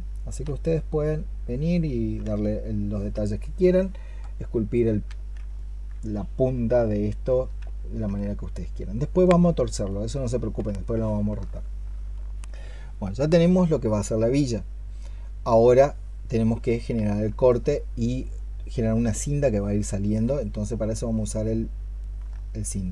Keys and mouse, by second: 5.4 alt+click, 7.1 alt+click, 11.4 alt+click, 20.4 alt+click, 22.1 alt+click, 22.3 alt+click.